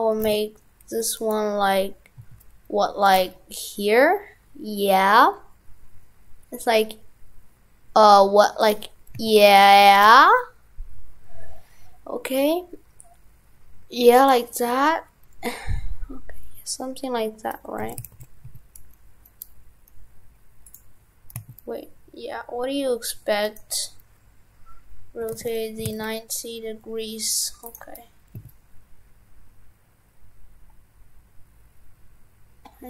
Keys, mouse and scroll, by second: 0.4 shift+f, 1.3 right click, 17.8 shift+f.